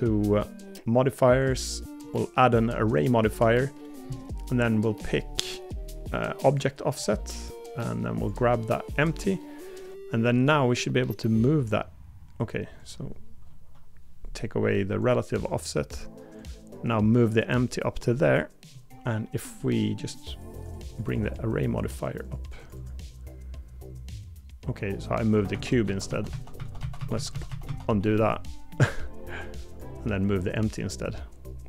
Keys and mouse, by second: 18.2 middle click, 25.5-27.9 ctrl+z.